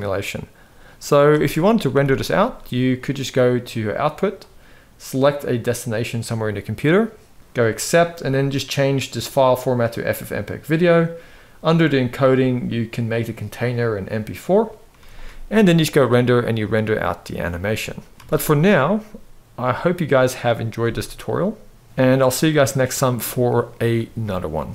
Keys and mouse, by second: 1.1 space, 1.8 ctrl+s, 4.0 click, 5.4 click, 9.2-10.3 drag, 11.3 click, 12.9-14.3 drag, 14.8 ctrl+s, 15.8-17.2 drag, 18.1 z, 20.6 space, 21.8 z, 22.8-23.5 middle drag, 23.9-24.2 middle drag.